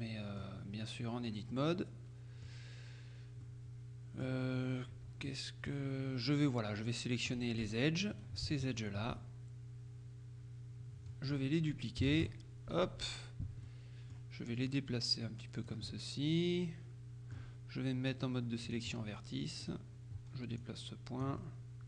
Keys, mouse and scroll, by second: 1.6-3.0 middle drag, 3.5-4.8 middle drag, 5.3 middle click, 7.4 click, 8.2 right click, 9.3 shift+click, 9.3 shift+right click, 12.2 shift+d, 12.8 shift+Escape, 13.7 click, 16.0 click, 18.7 click, 19.3 middle click, 19.7 right click, 20.7-21.8 drag, 21.5 right click.